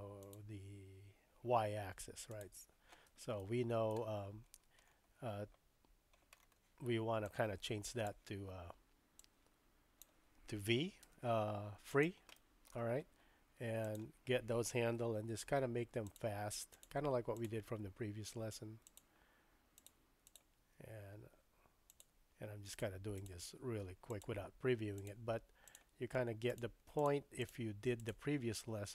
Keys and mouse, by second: 0.2 click, 2.3 click, 3.4 shift+middle click, 7.2 click, 7.4-7.7 typing, 9.3 click, 11.1 v, 12.5 shift+middle click, 13.2 v, 13.8 click, 15.2 g, 16.7 click, 17.3 click, 17.7 g, 19.8 click, 20.3 click, 21.1 g, 22.7 click, 23.2 click, 23.4 g, 23.9 g, 25.0 click, 25.6 click, 26.4 g, 26.9 click, 27.4 click, 28.0 click.